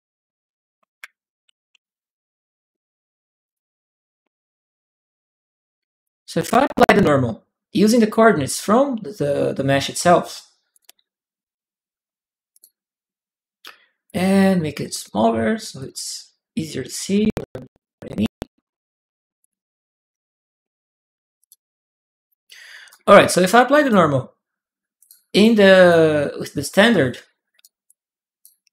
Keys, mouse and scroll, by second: 1.2-2.2 typing, 3.2 click, 4.9 click, 7.7 click, 10.5 click, 12.3 click, 13.8 click, 14.7 click, 15.6 click, 17.0 Tab, 19.2 click, 21.2 click, 22.7-23.7 drag, 24.8 click, 25.1 click, 25.6 click, 26.4 click, 27.4 click, 27.6-28.7 right drag.